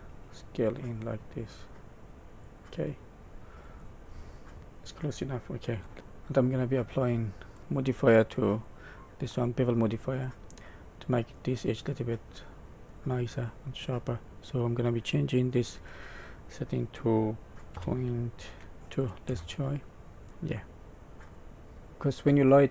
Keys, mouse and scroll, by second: 3.0 middle click, 3.8-4.6 scroll down 8, 4.6 middle click, 4.6 scroll up 1, 5.7 Tab, 5.9 middle click, 5.9 scroll up 1, 6.8 scroll up 2, 7.6-8.6 scroll down 1, 8.6 click, 10.6 middle click, 11.6-12.1 scroll up 1, 12.1 middle click, 15.2 click, 20.5 middle click, 21.6-22.3 scroll up 2, 21.7 middle click.